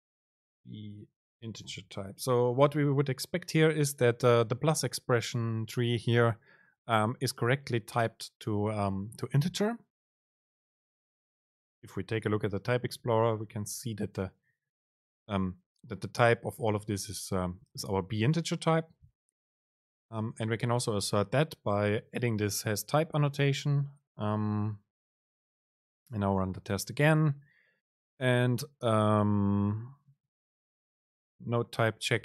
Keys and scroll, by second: 2.1 Up, 13.0 ctrl+shift+super+t, 25.0 super+r.